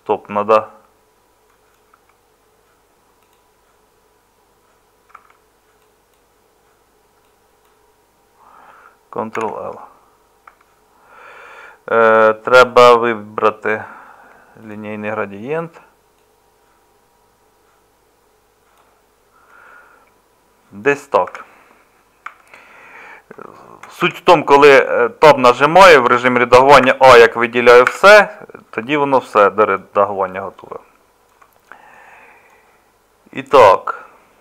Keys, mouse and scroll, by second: 1.7 middle click, 1.9 Tab, 5.2 Tab, 9.3 ctrl+l, 10.5 Tab, 21.3 Tab, 22.2 Tab, 24.0 Tab, 26.8 a, 27.9 Tab.